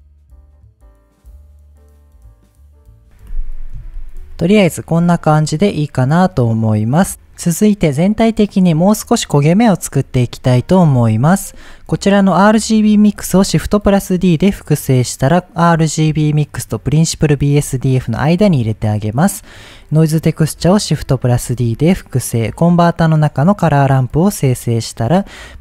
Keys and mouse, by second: 0.8 click, 1.4 ctrl+z, 5.8-6.5 middle drag, 11.3 click, 14.0 shift+d, 15.2 click, 19.2 middle click, 19.8 click, 20.4 shift+d, 21.2 drag, 21.6 shift+a, 25.1-25.6 drag.